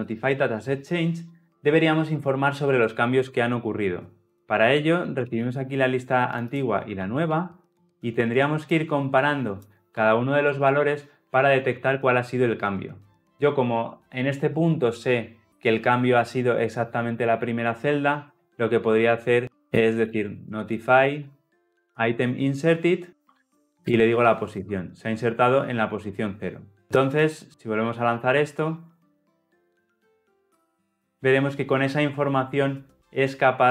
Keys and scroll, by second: 23.9 Return, 27.3 shift+F10.